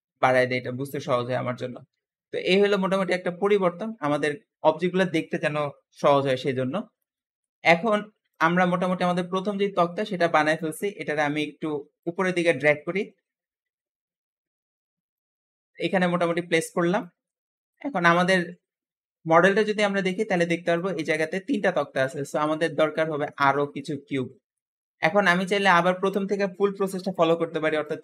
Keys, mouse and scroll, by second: 0.1-0.5 scroll down 2, 0.5-4.6 middle drag, 6.5-7.0 scroll down 1, 7.0-7.5 shift+middle drag, 7.5-8.2 scroll up 1, 8.2 click, 8.6-9.5 middle drag, 9.5-10.3 scroll up 1, 10.3-11.9 middle drag, 11.9 click, 15.3-15.7 scroll down 1, 15.9-16.6 middle drag, 16.6 scroll down 3, 16.9-18.1 shift+middle drag, 18.1-19.3 scroll down 2, 19.3-21.0 scroll up 2, 22.9 middle click, 23.8-24.4 scroll up 3, 24.4 shift+middle click, 24.9-25.3 scroll down 2, 25.3 shift+a.